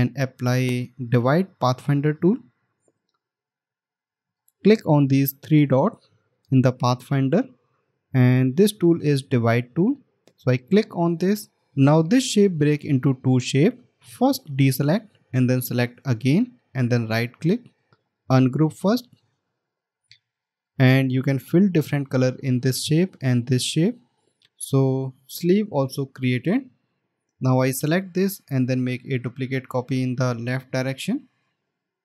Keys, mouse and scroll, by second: 17.4 right click, 26.6 alt+scroll down 1.